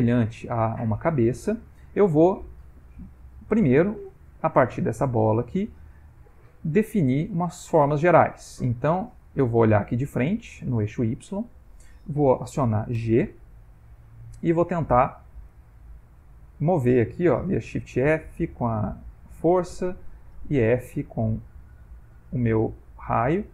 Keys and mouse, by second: 1.0 ctrl+middle click, 3.6 middle click, 6.0 ctrl+middle click, 10.6 click, 13.1 g, 14.2 click, 15.6 f, 17.4 shift+f, 19.2 click, 20.6 click, 22.7 click.